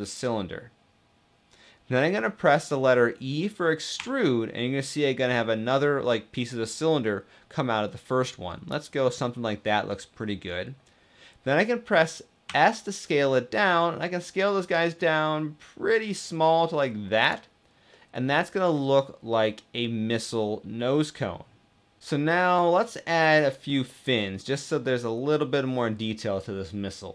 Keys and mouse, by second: 3.6 e, 4.3 e, 12.1 s, 16.9 click, 17.6-21.8 middle drag, 22.0-23.0 middle drag, 23.5-24.2 middle drag, 24.6-26.3 middle drag.